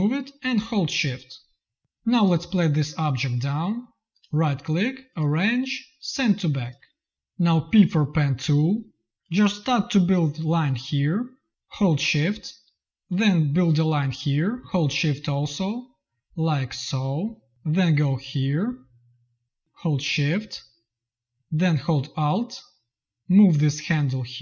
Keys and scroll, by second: 1.8 v, 7.5 p.